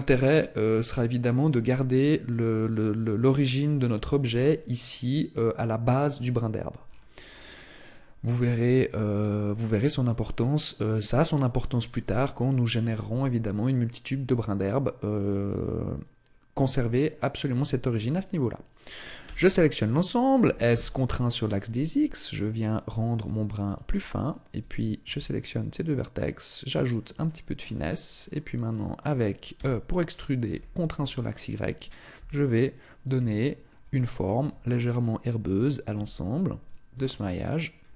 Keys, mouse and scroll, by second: 0.0-0.3 scroll up 3, 6.8-8.1 scroll down 5, 7.3-8.1 scroll up 2, 8.9 scroll up 2, 19.2 a, 19.4 a, 20.4 s, 23.2 click, 23.6 right click, 24.2 shift+right click, 25.0 s, 26.8 click, 27.2 shift+middle click, 28.2 right click, 28.7 shift+right click, 29.5 e, 31.8 click, 32.1 s, 32.7 click, 33.2 shift+middle click, 34.4 e, 36.7 click, 36.9 s, 37.6 click.